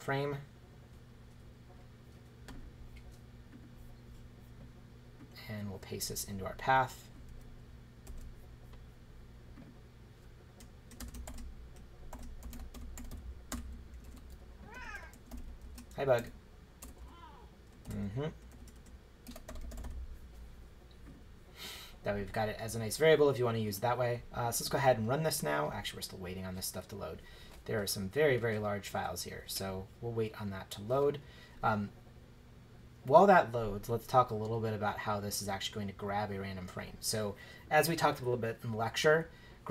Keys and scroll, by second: 8.1 super+v, 11.0-16.8 typing, 14.3 Left, 17.8-20.3 typing.